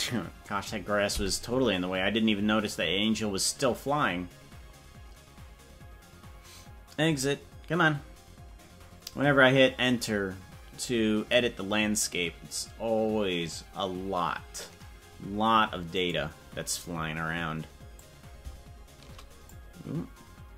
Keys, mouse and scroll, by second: 18.0-19.6 drag.